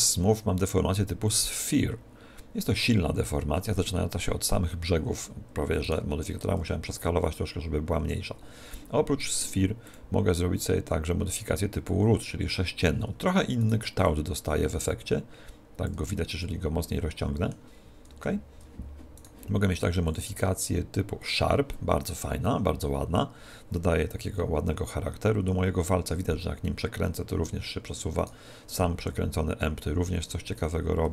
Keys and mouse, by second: 5.9 right click, 6.6 s, 9.2 right click, 9.9 click, 13.6 right click, 14.1 click, 16.4-18.4 middle drag, 18.2 KP_1, 19.2 right click, 20.1 click, 24.2 r, 28.2 right click, 29.0 r.